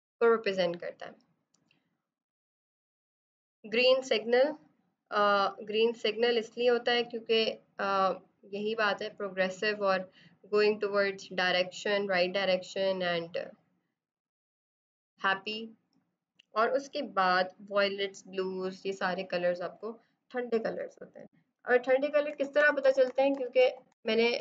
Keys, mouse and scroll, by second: 5.6 click, 8.4 click, 13.6 click, 20.6 typing, 21.8-24.4 typing.